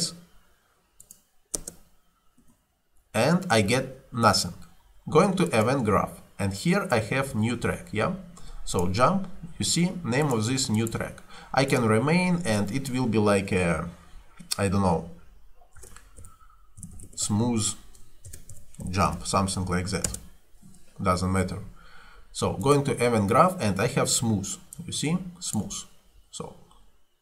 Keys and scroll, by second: 1.6 space, 2.5 Escape, 15.8-19.6 typing, 20.1 Return.